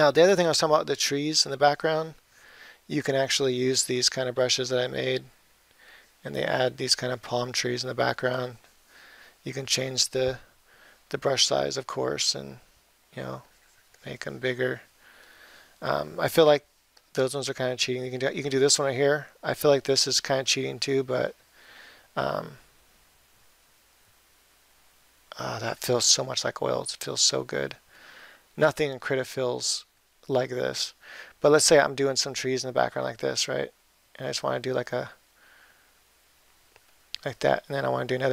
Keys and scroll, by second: 12.4 ], 13.1 [, 23.6 ctrl+z.